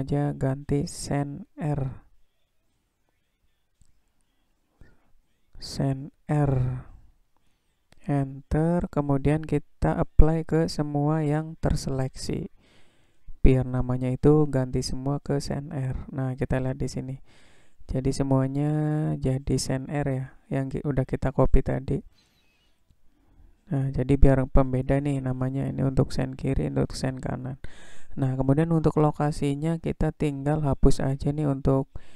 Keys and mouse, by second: 11.2-14.6 right drag, 26.5 click, 31.9-32.1 drag.